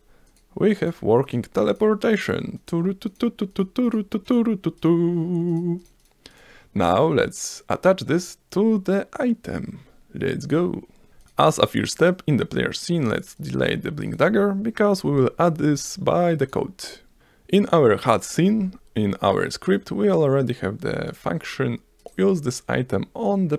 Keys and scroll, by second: 17.2 F1, 18.6 F3.